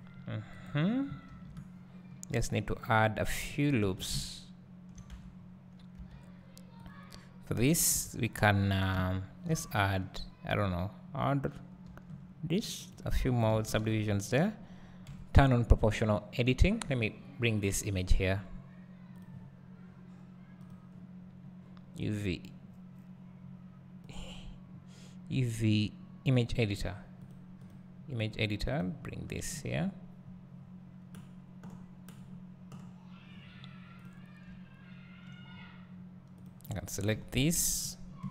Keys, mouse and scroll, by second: 0.7 right click, 1.3 ctrl+r, 2.8 right click, 3.5-3.9 scroll down 1, 3.9 Tab, 4.2 `, 5.2 Tab, 5.4-6.0 scroll up 1, 6.0 1, 6.9 click, 8.0 KP_7, 9.0 `, 11.9 ctrl+r, 13.9 a, 14.5 click, 15.1 KP_7, 28.2-34.5 drag, 34.5 `, 35.6-35.9 scroll up 1, 36.5 click, 37.2 KP_7, 37.8-38.3 scroll down 1.